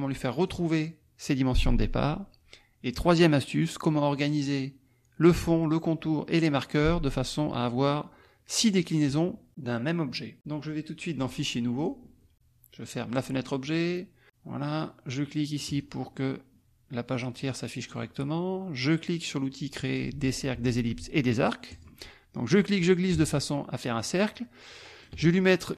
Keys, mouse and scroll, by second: 0.4 click, 7.8-9.2 drag, 11.3 click, 11.8 click, 13.1 click, 15.6 click, 21.7 click, 22.6-25.2 drag.